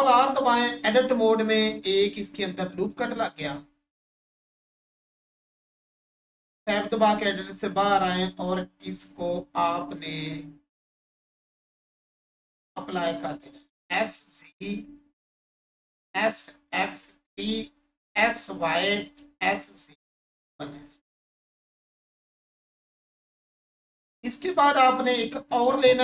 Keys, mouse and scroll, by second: 1.3 click, 2.7 right click, 6.3 Tab, 8.1 click, 11.9 click, 16.7 click, 16.9 3, 18.7 click, 21.0 1, 23.9 click.